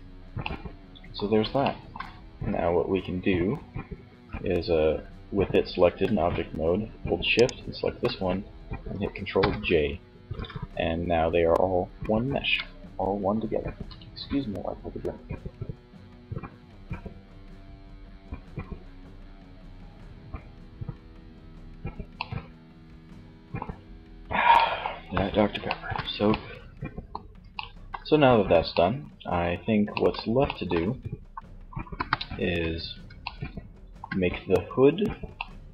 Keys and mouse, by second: 6.4-8.3 right drag, 8.8 ctrl+j, 9.3 Tab, 11.0 Tab, 21.1 middle click, 30.9 KP_1, 31.4 z.